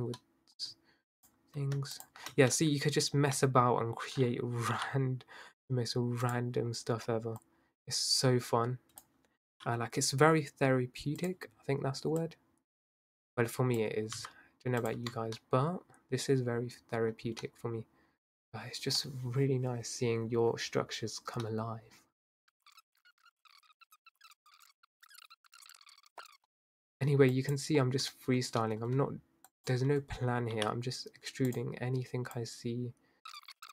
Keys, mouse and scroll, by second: 0.2 middle click, 1.2 shift+click, 2.0 shift+click, 2.4-3.1 scroll up 1, 3.1-4.8 middle drag, 4.8 i, 7.4 click, 9.5 i, 12.2 click, 14.2 s, 14.9 Tab, 15.7-17.2 middle drag, 17.2 scroll down 2, 17.4-18.2 middle drag, 18.2 scroll down 2, 18.4 scroll up 2, 18.5-19.0 scroll down 1, 19.0-22.2 middle drag, 22.2 scroll up 1, 22.4 scroll down 3, 22.4 middle click, 22.5 scroll up 1, 22.5 middle click, 22.6 Tab, 22.8 middle click, 22.9 shift+click, 23.0 middle click, 23.0 shift+click, 23.1 middle click, 23.4 shift+click, 23.5 middle click, 23.6 i, 23.9 i, 24.0 click, 24.1 Tab, 24.2 middle click, 24.3 scroll down 3, 24.4 middle click, 24.6 scroll up 3, 24.7-25.0 middle drag, 25.0-25.4 scroll down 1, 25.9 middle click, 26.1 scroll up 2, 26.2 middle click, 26.4 shift+click, 26.5 middle click, 27.3 shift+click, 28.4-29.5 middle drag, 29.5 shift+click, 30.5 i, 32.3 click, 33.3 e, 33.4 ctrl+z, 33.5 i, 33.6 click.